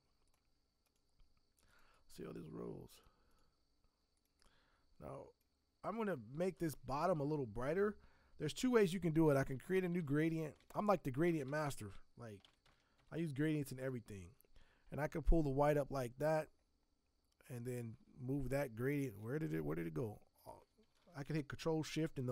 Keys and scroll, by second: 9.1 ctrl+shift+n, 9.8 ctrl+shift+g, 10.0 ctrl+r, 10.3 ctrl+a, 10.6 ctrl+d, 11.3 ctrl+e, 11.4 ctrl+n, 11.5 ctrl+t, 12.4 ctrl+d, 12.6 ctrl+x, 13.0 ctrl+g.